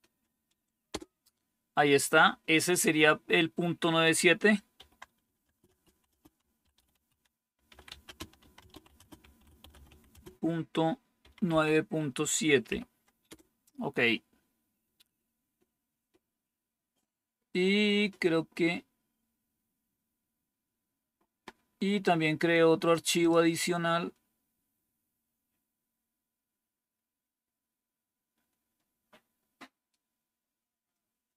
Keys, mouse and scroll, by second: 0.8 Return, 4.6-11.4 typing, 12.6-13.7 typing, 15.0-16.8 scroll down 2, 23.1 click, 23.5-25.1 scroll down 2, 25.1-27.1 scroll down 1, 27.1-27.7 scroll down 1, 27.7-29.6 scroll down 1, 29.6-30.5 scroll down 1, 30.5-31.3 scroll down 1.